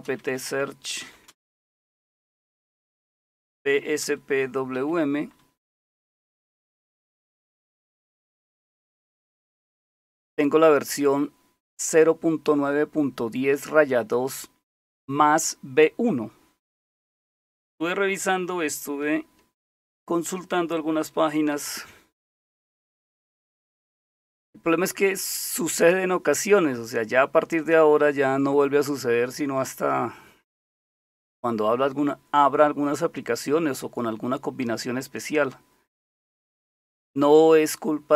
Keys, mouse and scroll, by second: 0.0-1.6 typing, 3.3-5.2 typing, 5.6 Return, 19.7 super+7, 21.5 alt+super+w.